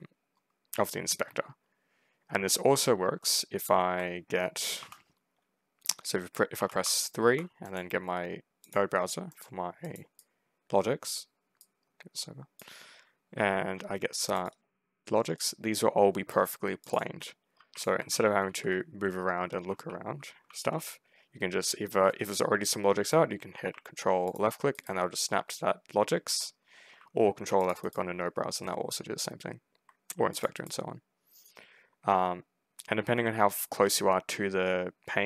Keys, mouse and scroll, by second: 0.2 ctrl+middle click, 1.6 ctrl+scroll down 2, 1.8 ctrl+middle click, 2.1 ctrl+middle click, 3.0 ctrl+middle click, 4.6 3, 6.4 3, 6.7 3, 7.5 middle click, 8.5 click, 9.2 middle click, 9.7 click, 10.0 right click, 11.5 right click, 12.4 middle click, 14.2 click, 14.4 click, 14.9 click, 15.0 click, 15.2 right click, 16.7 click, 16.8 click, 17.1 right click, 17.7 ctrl+click, 17.8-20.3 typing, 24.1 ctrl+click, 24.6 ctrl+right click, 26.3 ctrl+middle click, 27.5 ctrl+click, 27.7 ctrl+right click, 28.0 ctrl+scroll down 2, 29.4 ctrl+middle click, 30.2 ctrl+click, 30.4 ctrl+right click, 30.7 middle click, 30.7 scroll down 2, 31.9 ctrl+middle click, 34.9-35.2 ctrl+scroll up 2.